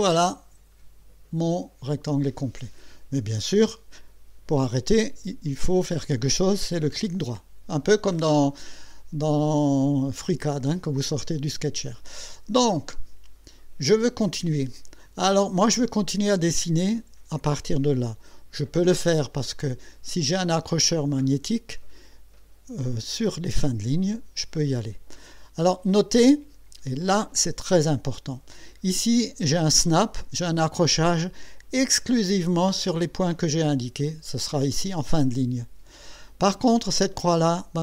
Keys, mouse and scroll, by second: 6.7 right click, 19.6 click, 23.9 click.